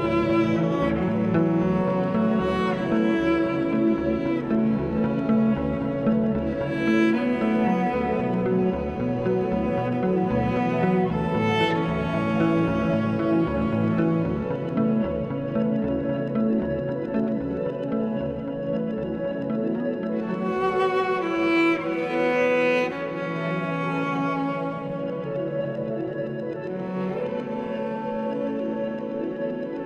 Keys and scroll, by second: 1.1 s, 8.4 s, 10.6 alt+e, 14.4 3, 19.6 s, 25.7 s, 29.0 s.